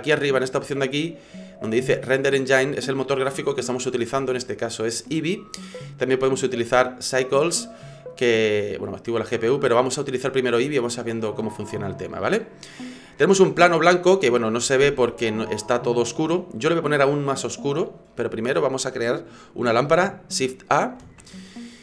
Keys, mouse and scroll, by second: 0.0 click, 5.0 click, 8.0 click, 9.8 click, 21.0 shift+a.